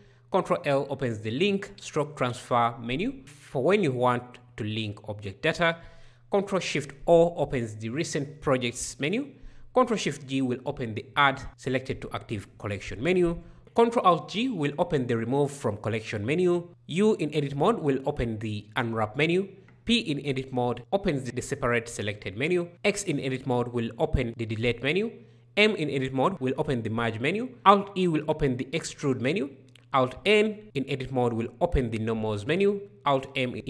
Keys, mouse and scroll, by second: 0.1 ctrl+l, 5.9 ctrl+shift+o, 9.4 ctrl+shift+g, 13.6 ctrl+alt+g, 16.7 u, 19.8 p, 22.7 x, 25.4 m, 27.5 alt+e, 29.4 alt+n, 33.2 alt+m.